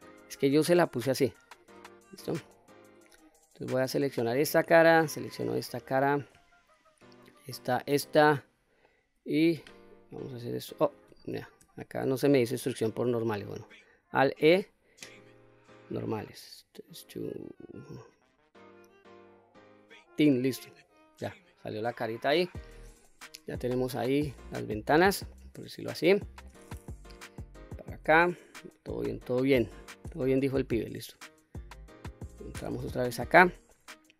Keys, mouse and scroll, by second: 0.1-1.0 scroll down 1, 1.2 3, 2.0 click, 2.5 middle click, 3.8-4.3 scroll up 1, 4.7 shift+click, 5.6 middle click, 6.8 shift+click, 7.5 shift+click, 8.0-8.8 middle drag, 9.6 e, 10.8 click, 11.6 ctrl+z, 14.2 alt+e, 19.9 click, 20.4-21.7 middle drag, 23.0-25.3 middle drag, 25.8-26.5 middle drag, 27.0 KP_3, 28.7 middle click, 30.1 Tab, 30.7-32.0 middle drag, 32.6 Tab, 33.1-33.6 scroll up 2, 33.7-34.1 middle drag.